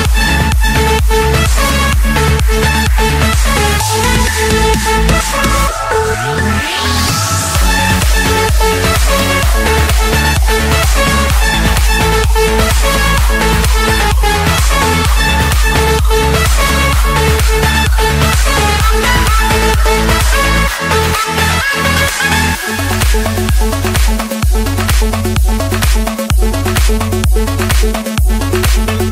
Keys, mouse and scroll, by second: 3.0 d, 3.2 Return, 4.4-5.6 typing, 6.6 Return, 8.7 click, 9.2 click, 11.5 typing, 13.0 Return, 14.8-15.9 drag, 17.1-18.3 drag, 17.8 Escape, 19.1-20.3 drag, 21.3 click, 21.6-22.4 scroll, 22.6 click, 22.9-25.2 scroll, 25.2 Escape, 25.6 right click, 27.2 click.